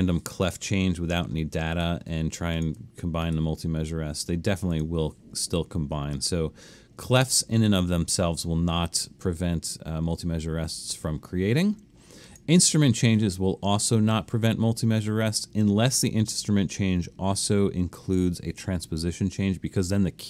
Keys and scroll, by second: 0.8 Escape, 6.2 super+z, 7.2 super+z.